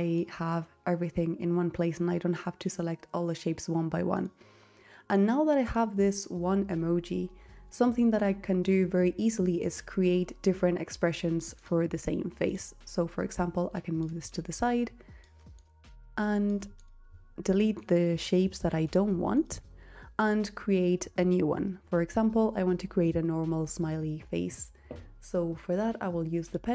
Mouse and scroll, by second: 16.0-18.0 drag, 18.7-20.8 drag.